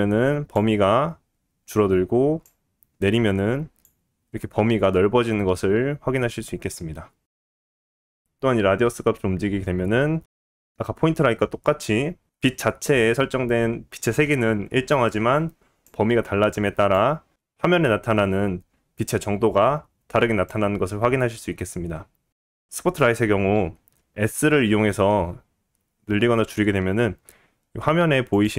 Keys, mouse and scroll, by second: 24.3 s, 28.4-28.5 middle drag.